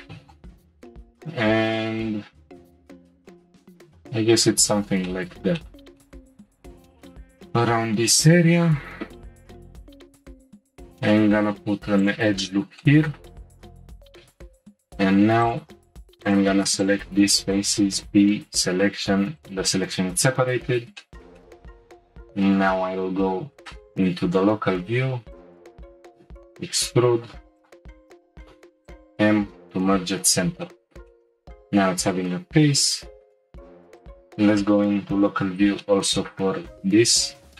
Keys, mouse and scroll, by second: 0.3-3.1 drag, 5.1-10.0 shift+middle drag, 10.0 ctrl+r, 12.4-14.4 shift+middle drag, 14.4 3, 15.4 alt+click, 16.2 alt+shift+click, 16.8 shift+click, 17.9 p, 18.9 Tab, 19.4 click, 20.3 /, 21.0-22.0 shift+middle drag, 22.0-23.3 scroll up 1, 23.3 Tab, 23.8 shift+middle click, 24.6 2, 25.3 alt+click, 26.2 e, 27.2 s, 28.5 m, 29.8 Tab, 30.7-32.1 middle drag, 32.1 Tab, 33.1 Tab, 33.5 /, 34.0 click, 35.2 /, 35.8-36.9 shift+middle drag, 36.9-37.2 scroll up 1, 37.2 Tab.